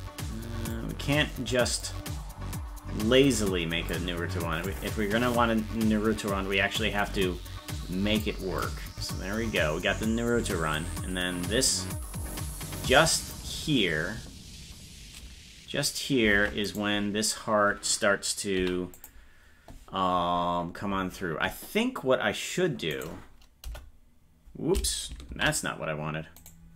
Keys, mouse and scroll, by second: 1.8-3.9 drag, 4.7-8.2 drag, 8.6-13.4 drag, 16.7 right click, 18.6 i, 22.9 right click, 23.7 Delete, 25.4 ctrl+z, 26.4 right click.